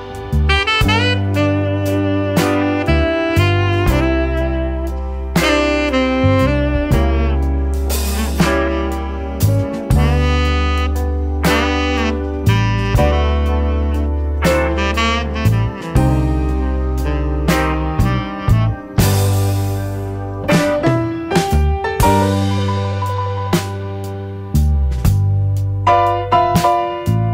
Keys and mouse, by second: 0.7-1.6 drag, 3.4 n, 5.0 click, 5.3 Delete, 6.2 click, 6.4 Delete, 7.3 shift+a, 10.4-11.3 drag, 12.5-14.0 drag, 15.2 click, 16.8-17.6 middle drag, 19.5 shift+click, 20.7 shift+click, 22.1-24.6 drag, 25.7-27.3 drag.